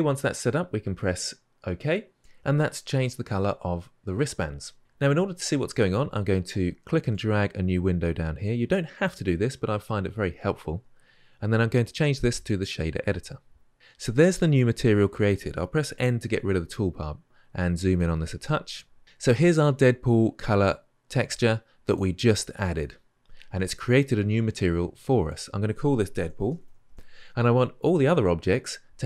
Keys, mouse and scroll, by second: 8.8-16.0 drag, 16.0 n, 20.8-26.9 drag, 26.9 o.